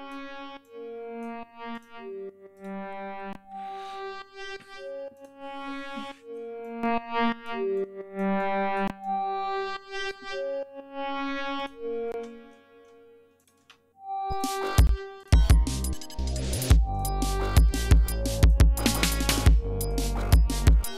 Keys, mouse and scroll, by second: 0.5 click, 1.6 click, 2.5 right click, 5.1 click, 6.5 click, 7.7 click, 8.9-10.2 drag, 11.5 click, 12.2 space, 12.4 ctrl+scroll down 2, 13.3 click, 13.5 space, 14.2 click, 14.8 space, 15.1 click, 15.9-17.1 drag, 17.4 click, 18.8 click.